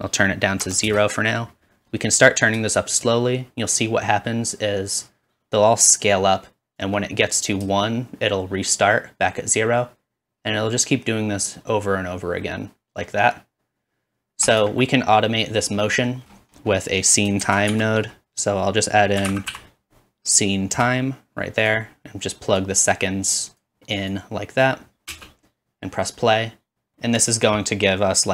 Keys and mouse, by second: 11.4-14.5 shift+drag, 14.6-21.6 shift+middle drag, 17.4 shift+a, 21.6-23.9 drag, 21.6 typing, 24.3-28.3 drag, 25.1 space.